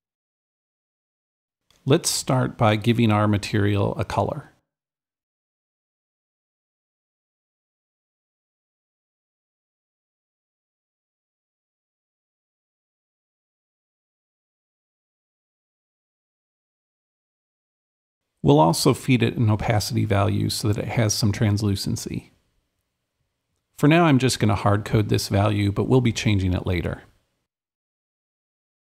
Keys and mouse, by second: 0.0-1.4 drag, 2.6-4.2 drag, 4.3-6.4 drag, 5.2-6.1 typing, 7.0-8.2 drag, 8.4-11.2 drag, 11.3-15.5 drag, 16.1-19.0 drag, 21.5-24.3 drag, 23.9-25.0 typing, 25.0 Left, 26.9 Return, 26.9 click, 28.3 ..